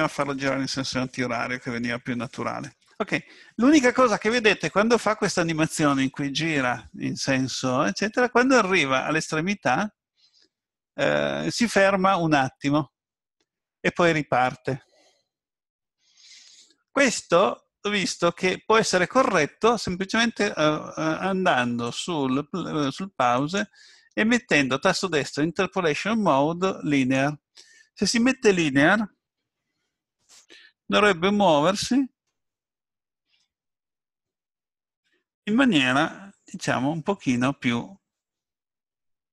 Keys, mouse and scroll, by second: 21.9 click, 23.4 right click, 30.1 click, 33.4 middle click.